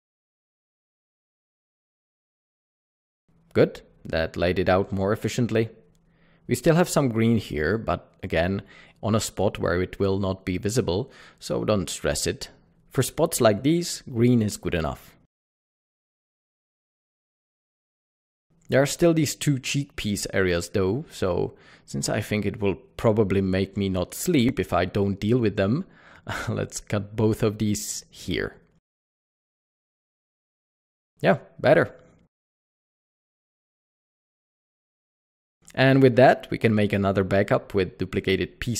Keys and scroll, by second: 5.5 q, 13.9 Tab, 16.0 Tab, 19.2-20.0 typing, 23.7 typing, 28.8 typing, 32.4 Tab, 32.9 typing, 37.9-38.7 typing.